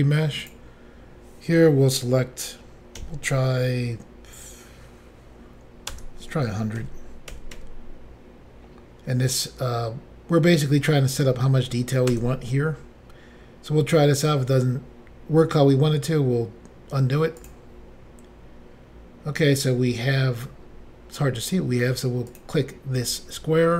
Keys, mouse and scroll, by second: 0.4 click, 3.0 5, 5.9-7.6 typing, 12.1 Return, 17.4 click, 17.5 click, 22.3 click, 23.6 scroll down 2.